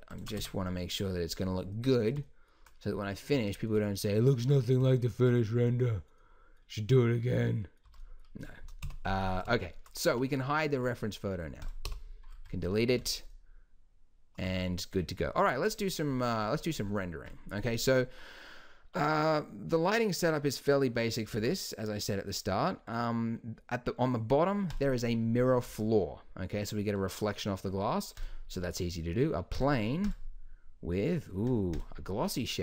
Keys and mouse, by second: 0.4 Tab, 4.4 z, 7.9 z, 8.8 KP_1, 10.1 n, 11.6-13.6 drag, 11.9 n, 12.9 z, 14.4 z, 21.3 shift+a, 25.4-32.6 drag, 25.7 z.